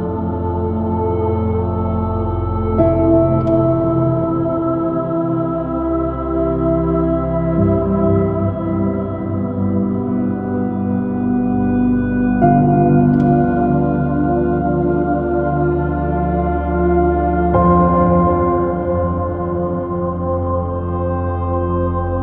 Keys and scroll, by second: 2.0 super+i, 2.1 super+space, 3.4 o, 5.8 ○, 6.7 ○, 12.4 super+-, 14.4 super+-, 17.3 super+i, 17.6 space, 19.1 s, 20.9 super+z, 21.9 super+space.